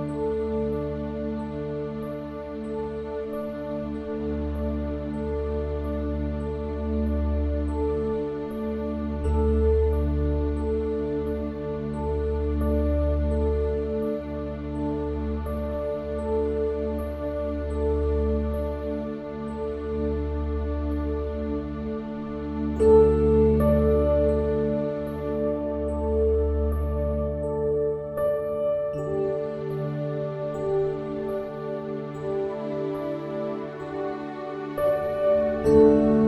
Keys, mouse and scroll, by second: 0.1 h, 0.3 middle click, 0.6 shift+a, 2.1 s, 2.8 click, 3.7 click, 4.3 s, 5.5 middle click, 5.8 click, 6.3 s, 7.8 click, 8.5 s, 9.7 click, 10.4 s, 11.8 click, 12.3 Tab, 12.8 Tab, 13.0 click, 13.5 Tab, 13.8 click, 14.4 ctrl+r, 15.5 ctrl+r, 16.6 ctrl+r, 18.1 middle click, 20.3 ctrl+r, 20.9 ctrl+r, 22.0 s, 23.5 ctrl+b, 25.3 s, 27.0 middle click, 27.4 ctrl+r, 28.5 ctrl+r, 29.8 middle click, 30.4 Tab, 30.6 Tab, 31.1 ctrl+r, 33.1 Tab, 33.6 Tab, 34.3 click, 35.4 click.